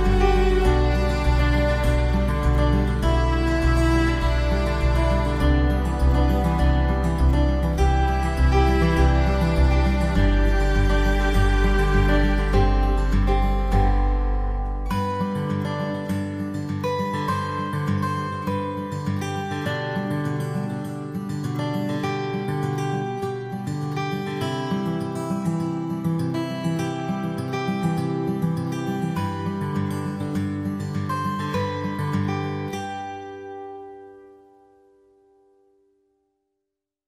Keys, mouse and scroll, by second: 0.1 click, 0.9 click, 1.3 click, 1.8 click, 2.3 middle click, 2.5 middle click, 2.8 click, 3.7 double click, 3.9 middle click, 4.1 w, 4.4 click, 5.9 w, 6.0 middle click, 6.1 scroll up 1, 6.5 shift+click, 6.7 shift+click, 6.9 shift+click, 7.5 shift+click, 7.9 shift+click, 8.5 middle click, 8.7 click, 8.9 middle click, 8.9 scroll down 1, 9.2 scroll up 1, 10.3 click, 10.5 click, 10.6 click, 11.1 shift+click, 11.8 middle click, 12.0 click, 13.4 middle click, 13.4 middle click, 13.8 BackSpace, 14.1 middle click, 14.6 click, 14.9 click, 15.2 click, 15.7 click, 16.1 click, 16.2-17.0 typing, 16.9 click, 17.5 double click, 17.8 click, 18.9 click, 19.7 click, 19.8 click, 20.3 click, 21.0 double click, 21.5 alt+w, 21.7 middle click, 21.7 scroll down 1, 22.0 click, 22.4 alt+middle click, 22.6 alt+middle click, 23.1 click, 23.2 click, 24.6 click, 25.2 click, 25.8 click, 26.1 alt+w, 26.5 middle click, 26.5 scroll down 1, 26.9 s, 27.3 click, 27.8 middle click, 27.8 scroll down 1, 28.1 shift+click, 28.3 shift+click, 28.6 shift+click, 29.2 right click, 29.8 click, 30.4 scroll up 1, 31.0 click, 32.0 middle click, 32.0 scroll down 1, 32.3 click, 32.5 click, 32.6 scroll up 1, 33.0 click, 34.2 click, 34.3 click, 35.0-36.5 typing, 35.1 click, 35.5 click, 35.5 scroll up 1, 36.0 click, 36.7 click.